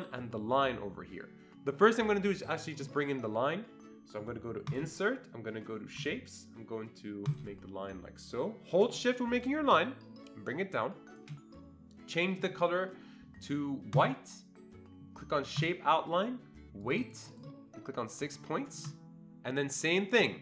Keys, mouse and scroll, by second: 2.7 click, 4.7 click, 6.0 click, 7.2 click, 9.7-11.3 shift+drag, 16.8 click, 17.0 double click, 17.3 click, 18.3 click.